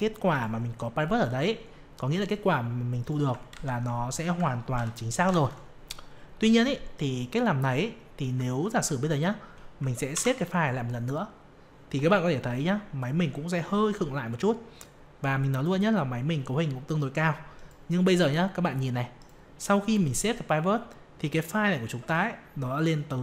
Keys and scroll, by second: 3.5 ctrl+Up, 10.1 ctrl+s.